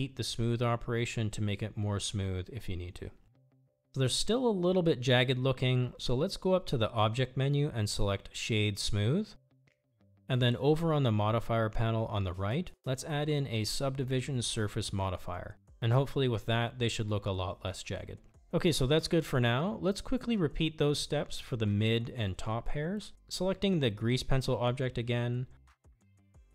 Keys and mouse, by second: 0.0-1.2 typing, 2.8 Tab, 3.4 click, 5.4 middle click, 9.5-10.8 drag, 13.0-15.6 drag, 17.3 click, 24.4 click.